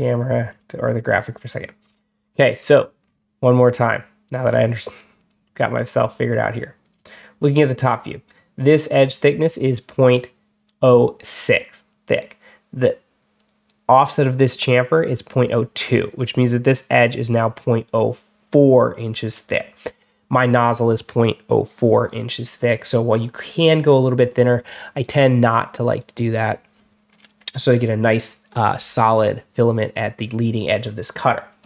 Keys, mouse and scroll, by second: 0.4 click, 1.7 scroll up 2, 2.1 scroll down 2, 2.5 scroll up 2, 2.9-3.7 scroll down 2, 6.7 click, 23.2 click, 25.7 click.